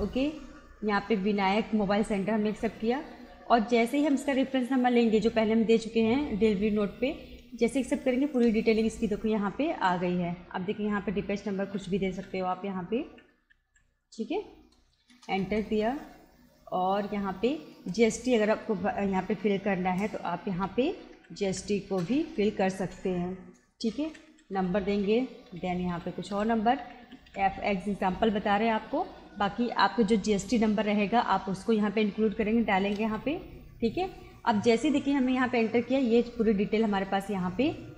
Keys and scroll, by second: 1.1 Down, 2.6 Return, 3.8 Down, 7.4 Return, 9.8 BackSpace, 11.7-13.7 typing, 15.1 Return, 17.8 Return, 20.5-22.3 typing, 24.1-27.3 typing, 33.0 Return, 36.3 Return.